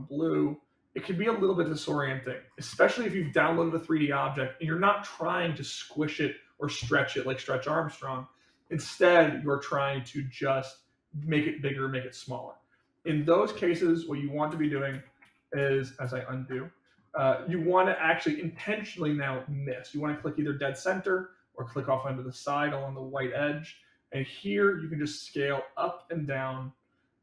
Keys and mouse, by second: 2.8 middle click, 14.5 ctrl+z, 14.8 ctrl+z, 16.6 middle drag, 17.2 middle click, 23.7-27.2 drag.